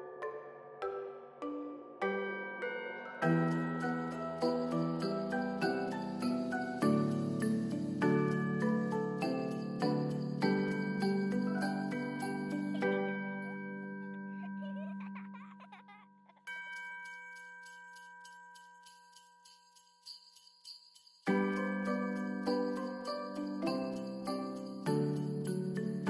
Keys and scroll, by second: 15.2 3, 15.4 Return, 17.9 Return, 19.2 5, 19.4 Return, 21.0 ctrl+s, 25.1 ctrl+z.